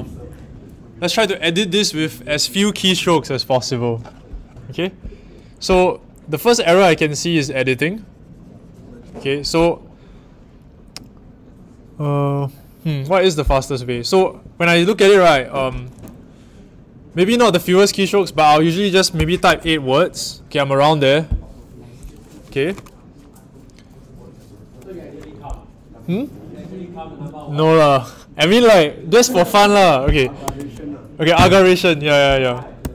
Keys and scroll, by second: 18.9-19.9 typing, 30.4 w, 32.8 l.